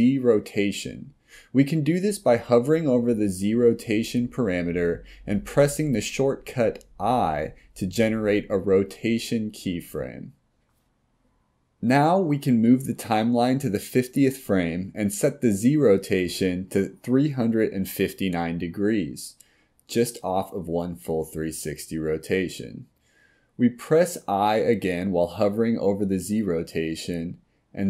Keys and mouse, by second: 12.6-15.6 drag, 17.7-25.9 drag, 27.1 click.